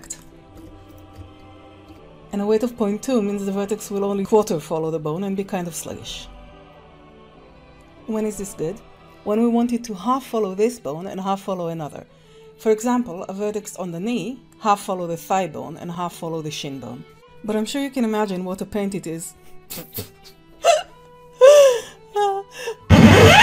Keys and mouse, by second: 0.4 ctrl+Tab, 0.6 ctrl+Tab, 0.9 click, 1.1 g, 6.0 g, 17.1 ctrl+Tab.